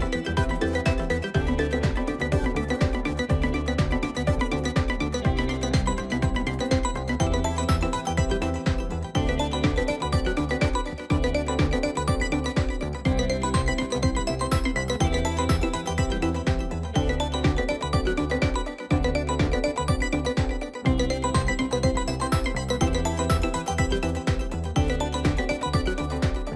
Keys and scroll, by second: 10.6 ctrl+i.